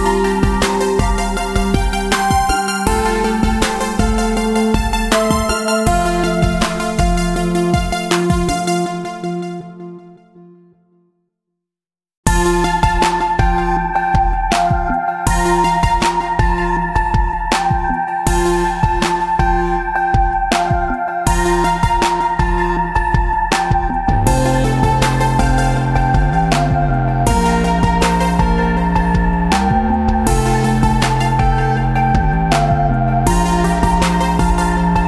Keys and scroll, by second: 30.3 KP_9, 30.4 KP_0.